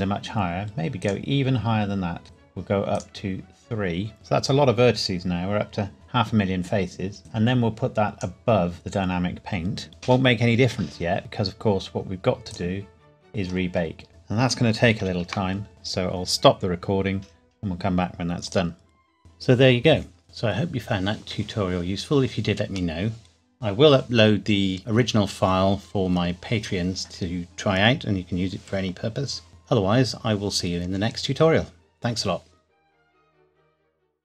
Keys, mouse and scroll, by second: 1.0 click, 4.1-4.8 scroll down 1, 7.2 click, 12.5 click, 13.2-13.5 scroll down 1, 15.0 ctrl+s, 18.5 click.